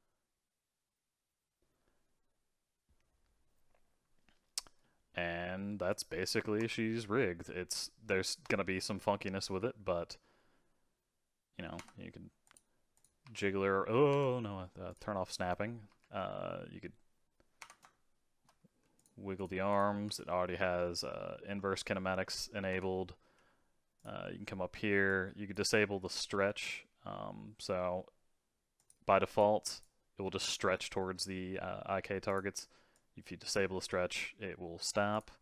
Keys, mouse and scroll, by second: 4.8-5.9 middle drag, 5.9 click, 6.6 ctrl+Tab, 7.7 click, 8.1-8.7 shift+middle drag, 8.7-9.2 scroll up 4, 9.2 scroll down 1, 9.4 g, 12.4 click, 12.9 click, 13.2 r, 14.8 click, 15.9 r, 17.8-18.9 middle drag, 18.9 click, 19.3 click, 19.7 click, 20.0 g, 23.9 click, 25.0-26.3 drag, 26.3 g, 29.3 click, 30.2 g, 32.9-34.1 drag, 34.1 g.